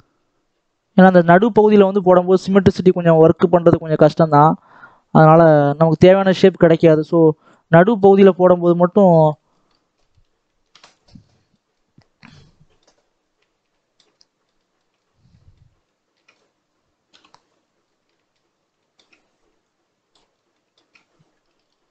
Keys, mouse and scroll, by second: 9.4 scroll down 2, 9.6-11.6 middle drag, 11.6 scroll up 2, 11.8-12.2 scroll down 2, 12.2 middle click, 12.8 scroll up 1, 13.1-13.6 scroll down 2, 13.6-14.8 shift+middle drag, 14.8-15.2 scroll up 1, 15.2 middle click, 16.2-16.6 scroll up 2, 16.6-17.0 scroll down 1, 17.0 KP_7, 17.7 scroll up 3, 18.0 shift+middle click, 18.4 scroll up 1, 18.7 shift+middle click, 19.6 click, 20.2 scroll up 1, 20.4 shift+middle click, 20.8-21.6 scroll up 2, 21.6-21.9 ctrl+drag.